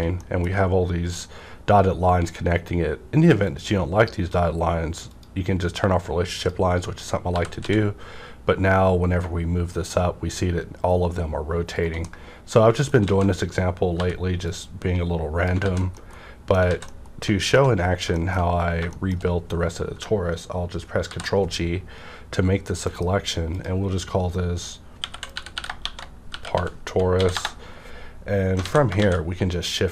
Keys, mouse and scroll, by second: 3.5 click, 3.5 middle click, 5.0 click, 6.8-7.3 scroll down 1, 7.3 typing, 11.7 right click, 11.7 z, 12.0 middle click, 12.0 scroll down 1, 12.1 middle click, 13.0 alt+a, 13.9 b, 14.4-15.9 drag, 15.6 alt+z, 15.9-17.9 middle drag, 16.6 alt+z, 17.8 scroll down 1, 18.1 shift+middle click, 18.4 shift+scroll up 1, 18.8 shift+middle click, 21.1 ctrl+g, 22.8 F9, 23.5 click, 24.9-27.1 typing, 27.3 Return, 28.6 alt+a.